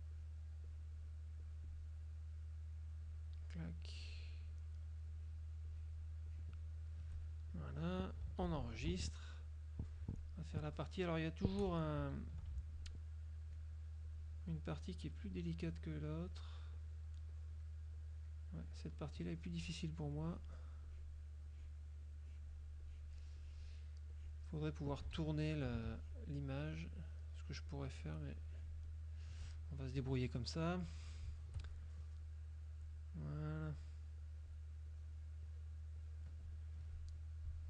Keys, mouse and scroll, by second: 0.2-1.2 shift+drag, 1.6 shift+click, 3.2 shift+click, 3.9 shift+click, 4.6 shift+click, 5.2-6.2 shift+drag, 6.4 shift+click, 7.4-8.0 shift+drag, 8.6 ctrl+s, 9.5-10.5 shift+drag, 11.0 shift+click, 12.8-13.8 ctrl+shift+drag, 14.2-14.8 shift+drag, 15.4-16.0 shift+drag, 16.2 shift+click, 16.8 shift+click, 18.0 shift+click, 18.7 shift+click, 20.3 shift+click, 21.0 shift+click, 21.6 shift+click, 22.3 shift+click, 22.9 shift+click, 23.4 shift+click, 24.2 shift+click, 26.0 ctrl+shift+click, 26.8 shift+click, 27.8 shift+click, 28.5 shift+click, 30.1 KP_Subtract, 30.8 click, 32.3-33.2 shift+drag, 33.4-34.1 shift+drag, 34.3-34.9 shift+drag, 35.0 shift+click, 35.6 shift+click, 37.2 shift+click.